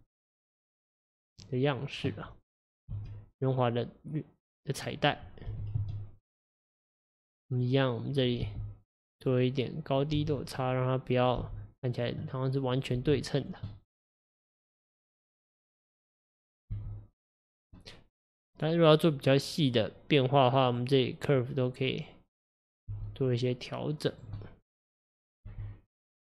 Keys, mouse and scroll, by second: 0.5-3.0 drag, 3.0 s, 5.5 g, 7.5 click, 8.5 g, 9.9 click, 10.2 g, 11.2 click, 11.4 g, 12.8 click, 13.0 g, 13.7 middle click, 14.4-14.8 scroll down 3, 14.8 scroll up 2, 15.5 middle click, 16.3 click, 16.8 g, 17.8-20.7 middle drag, 20.7 click, 21.5 click, 22.9 g, 24.4 middle click, 25.2 click, 25.5 g.